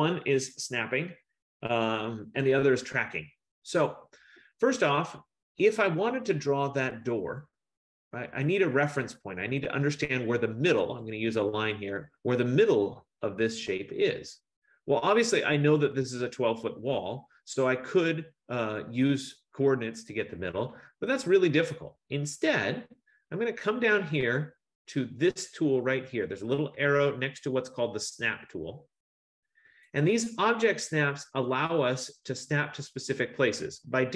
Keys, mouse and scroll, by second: 11.1 click, 22.3 F15, 30.1-34.1 drag.